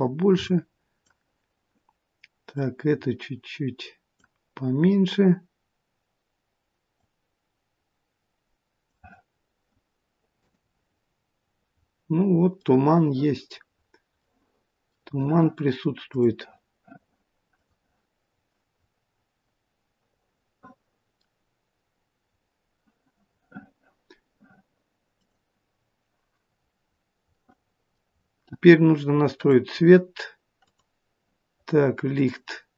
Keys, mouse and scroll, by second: 17.9 click, 18.8-19.3 scroll up 2, 19.6 middle click, 22.3 scroll down 4, 25.5 click, 26.7-27.1 scroll up 3, 27.6 middle click, 27.6 scroll up 2, 28.2-29.5 scroll down 1, 29.5 click, 29.5-30.1 scroll down 3, 30.8 click.